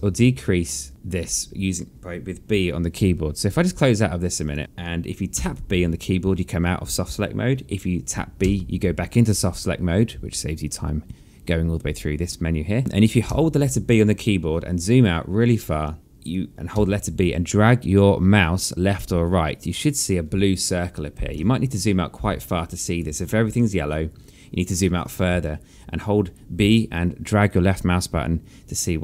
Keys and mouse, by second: 0.9 alt+middle click, 4.8 click, 6.1 b, 9.1 b, 14.0 b, 17.5 b, 18.0 click, 22.0 b, 23.2 click, 26.0 b.